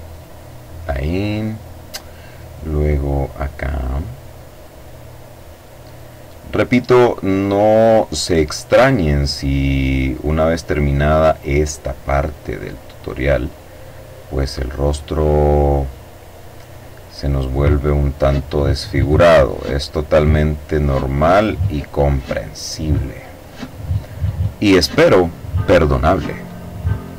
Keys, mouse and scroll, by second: 0.0-1.5 middle drag, 2.0 click, 2.8 click, 4.0 click, 5.6 click, 7.5 click, 9.2 click, 10.6-11.8 drag, 12.5 click, 13.3 click, 14.6-15.5 drag, 16.3 click, 17.0-18.1 drag, 18.1 click, 19.3 click, 21.3 click, 22.3 middle click, 23.1 click, 25.1 click, 26.5 click.